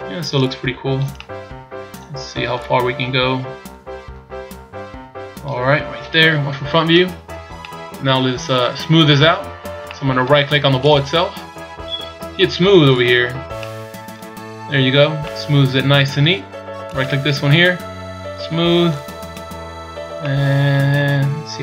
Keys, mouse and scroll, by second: 0.3 click, 1.2 middle click, 2.5 click, 5.6 scroll down 3, 6.4 KP_1, 7.6 middle click, 9.8 middle click, 10.8 right click, 12.8 click, 13.5 middle click, 14.3 scroll up 2, 15.2 middle click, 17.1 right click, 18.9 click, 19.6-20.0 scroll up 3, 20.2 middle click.